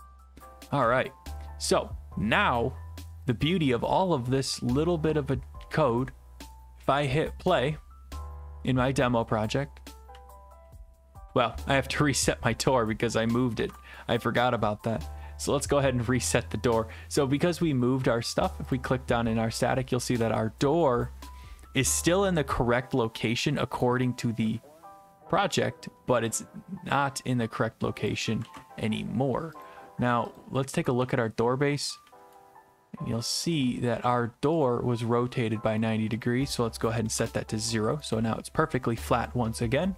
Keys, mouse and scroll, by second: 0.7 click, 1.1 ctrl+s, 3.3 click, 7.2 click, 10.1 w, 10.6 d, 12.4 Escape, 13.6 alt+F4, 18.8 click, 19.8-21.5 typing, 21.0 click, 23.2 w, 23.9 right click, 28.1 click, 28.4 ctrl+z, 29.6 click, 31.0-32.5 typing, 32.3 right click, 34.6 click, 35.8 click, 36.2 click, 36.5 click, 37.1-38.7 typing, 37.2 Return, 39.3 right click.